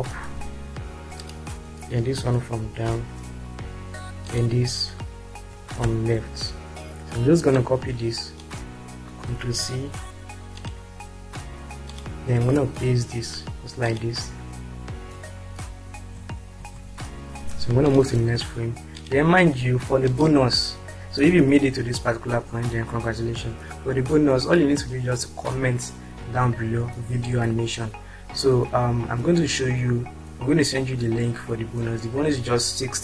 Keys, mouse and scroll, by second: 2.8 Down, 5.5 Left, 9.3 ctrl+c, 16.5 ctrl+r, 20.0 click.